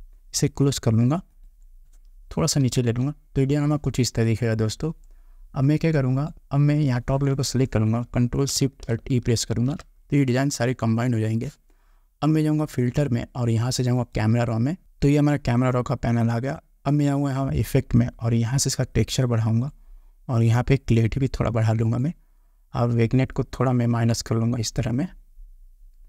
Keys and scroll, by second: 2.8 Down.